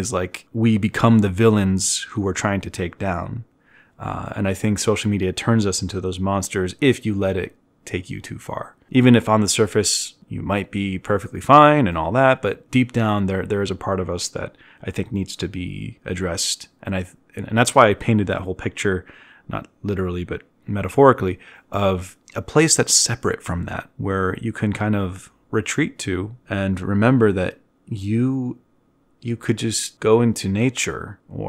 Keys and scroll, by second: 0.6 z, 2.2 ctrl+alt+1, 3.6 e, 7.1 z, 9.6 ctrl+alt+1, 10.0 b, 16.8 z, 18.7 z, 22.7 e, 27.0 v.